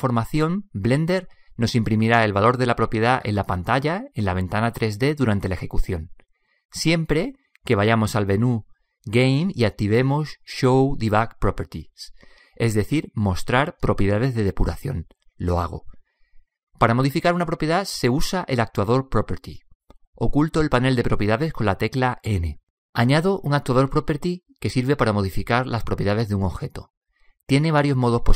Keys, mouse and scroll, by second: 7.8 click, 21.2 n, 24.0-24.8 middle drag, 25.0 click, 25.5 middle drag, 27.2-28.3 middle drag.